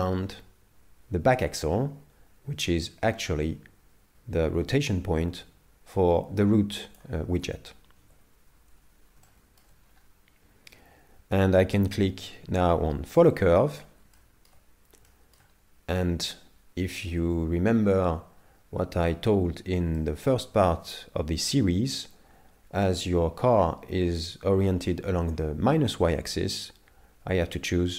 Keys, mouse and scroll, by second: 8.1 KP_7, 9.3 shift+middle click, 9.9-11.1 scroll up 3, 13.2 click, 14.2 shift+middle click, 20.0 shift+middle click.